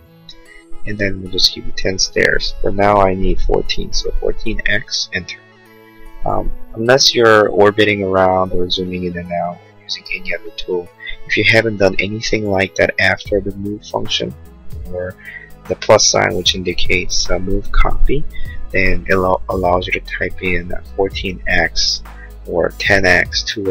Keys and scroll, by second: 0.0 Return, 4.0 4, 5.1 Return.